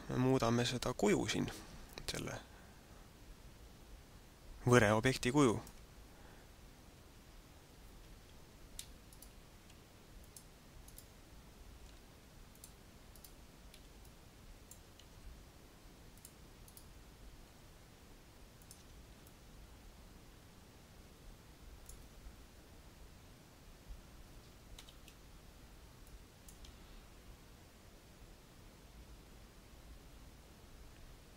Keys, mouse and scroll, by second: 8.3 Tab, 9.3 right click, 9.7 v, 10.3 click, 10.8 right click, 11.8 v, 12.5 click, 13.1 right click, 13.9 middle click, 15.1 v, 16.3 click, 16.6 right click, 17.4 v, 18.6 click, 18.7 Tab, 19.2 middle click, 24.8 KP_Divide, 26.2 click, 26.6 alt+a.